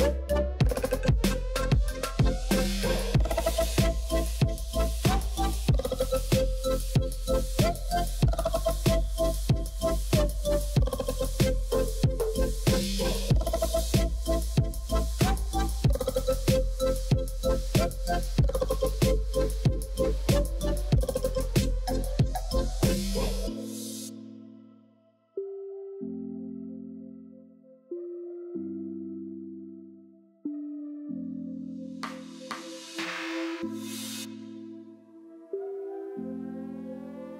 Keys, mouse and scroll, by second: 0.7 scroll up 4, 1.0-2.3 middle drag, 2.3-2.6 scroll down 2, 2.6-3.0 middle drag, 3.0 scroll down 1, 3.2 middle click, 3.5 click, 4.0-5.6 scroll up 1, 5.6 click, 6.0 Tab, 6.0 click, 6.5 Tab, 7.5 l, 7.8 l, 8.8 l, 9.3 l, 10.3 click, 10.8 Tab, 10.9 click, 11.3-13.1 middle drag, 13.1 scroll down 1, 13.2-13.9 middle drag, 13.9 space, 14.5-16.0 middle drag, 16.6-18.2 middle drag, 18.3 space, 19.2 shift+Left, 19.8-22.7 middle drag, 22.7 scroll up 1, 22.9 middle click, 23.6 scroll up 1, 23.7-25.7 scroll down 1, 25.7-27.9 scroll down 1, 28.4 KP_0, 29.7 click, 30.4 n, 32.0 click, 32.4 n, 32.8-33.3 scroll down 8, 33.3 middle click, 33.7 scroll down 1, 33.8-34.9 shift+middle drag, 34.9 r, 35.3-35.7 middle drag, 35.7 scroll down 1, 35.8-36.5 shift+middle drag, 36.5 scroll down 1, 36.6 shift+middle click, 36.7 scroll up 1, 36.9-37.3 shift+middle drag.